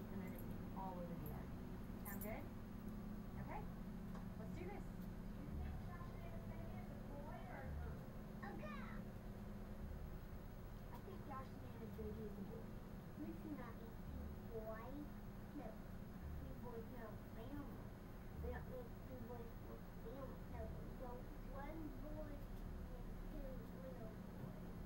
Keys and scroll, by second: 22.8 Delete.